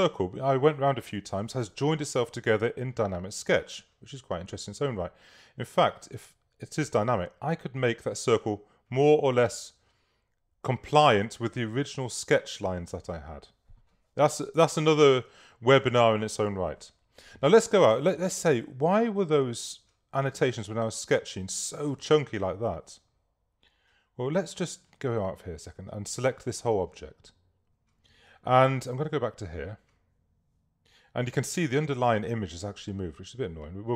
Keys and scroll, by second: 14.6 super+-.